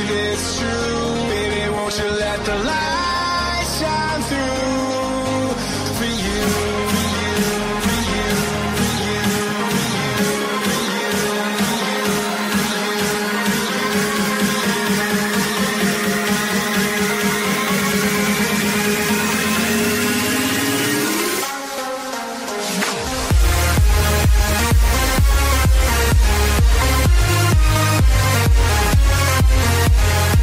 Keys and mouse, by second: 0.9 right click, 3.0 right click, 5.1 click, 6.2 click, 8.0 click, 8.4 space, 14.8 click, 16.1 click, 17.2 click, 17.9 click, 18.0 ctrl+shift+c, 19.2 ctrl+shift+c, 21.0-24.0 typing, 27.8 click, 29.8 click.